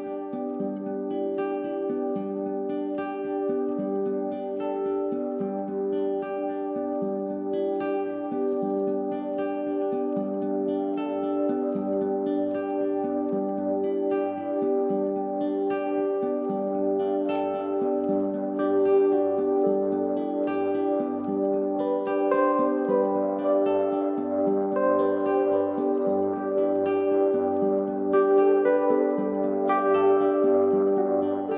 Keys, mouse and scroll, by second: 0.5 Delete, 1.8 shift+a, 9.8 ctrl+a, 11.4-12.9 middle drag, 12.9-15.9 drag, 16.4-17.6 middle drag, 17.6 KP_3, 18.3 g, 20.2-20.8 middle drag, 20.8 click, 21.4 g, 22.6-24.6 middle drag, 24.6 click, 28.4 click, 31.3 click.